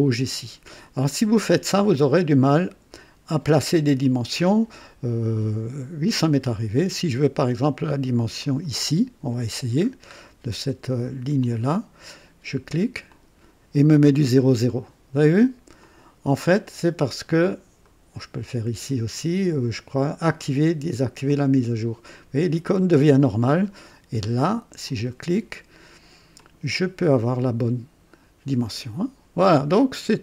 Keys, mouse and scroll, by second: 6.2 right click, 8.3 click, 9.8-10.1 scroll up 1, 11.4 click, 13.1 click, 15.8 click, 17.3 click, 17.8 right click, 21.2 click, 24.8 click, 26.3 click.